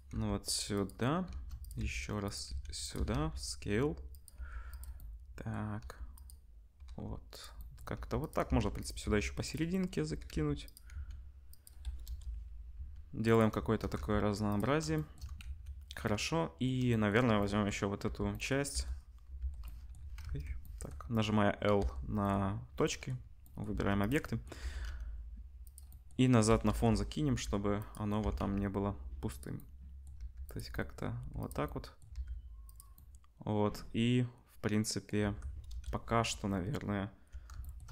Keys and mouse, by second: 0.1 g, 1.2 shift+d, 1.7 r, 2.4 s, 2.9 r, 4.3 g, 5.7 g, 6.8 r, 7.9 g, 8.6 shift+d, 9.0 r, 10.1 r, 10.9 s, 12.0 KP_0, 12.7 s, 13.9 g, 15.4 ctrl+s, 15.8 middle click, 18.0 l, 18.7 l, 19.4 l, 20.2 ctrl+z, 21.7 l, 22.8 middle click, 23.7 shift+d, 24.6 r, 26.7-37.9 middle drag, 26.7 KP_0, 27.3 g, 28.2 r, 30.1 g, 31.1 g, 32.1 g, 35.2 Tab, 35.6 KP_0.